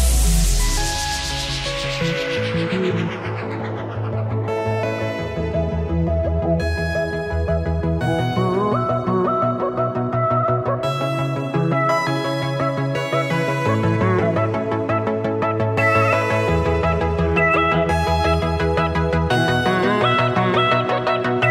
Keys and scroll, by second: 9.2 alt+super+2, 11.3 super+c, 13.8 super+f, 16.6 super+7, 18.0-18.9 typing, 20.0 super+x.